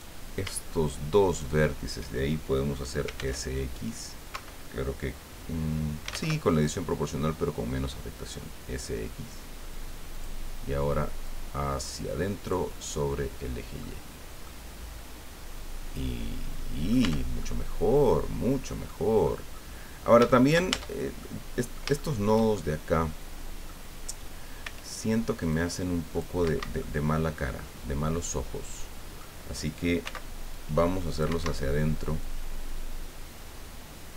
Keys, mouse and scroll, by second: 1.3 shift+right click, 3.0 s, 3.1 x, 4.3 Escape, 6.0 s, 6.1 x, 6.4-7.1 scroll up 1, 10.1 click, 11.2-12.7 drag, 14.0 scroll down 2, 14.4-17.1 drag, 17.0 Tab, 17.4-19.4 drag, 19.5-19.9 scroll up 2, 20.3 shift+click, 20.7 shift+Tab, 21.2 shift+click, 22.0 shift+click, 22.5-22.8 shift+scroll up 1, 22.8 middle click, 24.6 c, 25.5 click, 26.4 Escape, 26.8-29.3 middle drag, 30.0 c, 30.5 click, 31.3 Escape, 32.2-33.3 drag, 33.3-33.9 scroll up 1.